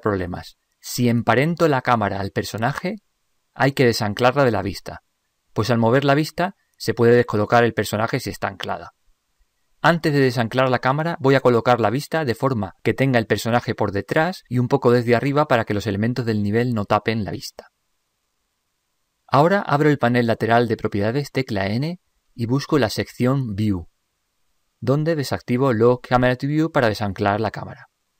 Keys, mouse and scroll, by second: 11.7-13.4 middle drag, 15.0-17.4 middle drag, 21.7 n, 23.2-25.0 drag, 26.4-28.1 drag.